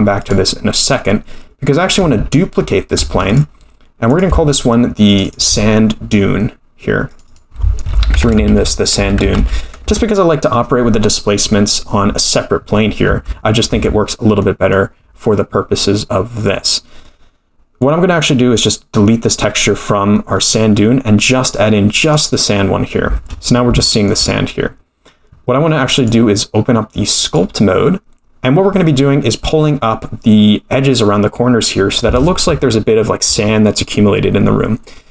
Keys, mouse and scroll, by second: 0.2-0.9 drag, 1.6-2.1 scroll down 2, 3.0 shift+d, 4.1 click, 5.2 click, 7.1 click, 7.2-10.9 drag, 8.5 d, 13.1 Tab, 13.7 Tab, 14.4 middle click, 17.0-17.9 middle drag, 20.4 click, 21.2 click, 23.8-24.1 shift+middle drag, 25.9-27.3 drag.